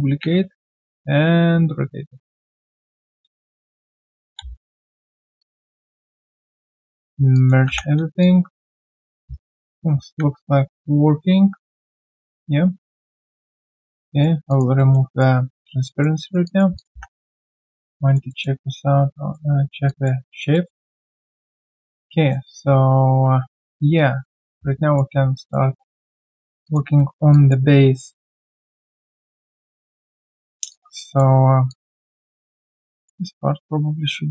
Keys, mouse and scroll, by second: 0.0-0.4 typing, 2.7 alt+click, 3.0 alt+right click, 3.4 shift+click, 4.1 ctrl+alt+c, 4.6 right click, 7.3 alt+click, 8.0 3, 8.2 alt+click, 8.9 alt+right click, 10.2 1, 10.8 1, 11.9 right click, 14.5 alt+click, 14.7 alt+middle click, 15.1 alt+click, 15.8 alt+click, 16.2 alt+right click, 16.4 alt+click, 17.2 3, 18.3 alt+middle click, 18.6 alt+click, 19.8 alt+click, 20.2 1, 20.5 alt+middle click, 20.8 alt+click, 22.1 alt+middle click, 22.5 alt+click, 24.5 typing, 24.7 right click, 25.3 alt+middle click, 26.0 alt+click, 26.9 alt+middle click, 27.3 alt+click, 30.7 alt+click, 32.0 alt+right click, 32.9 alt+click, 34.1 alt+middle click.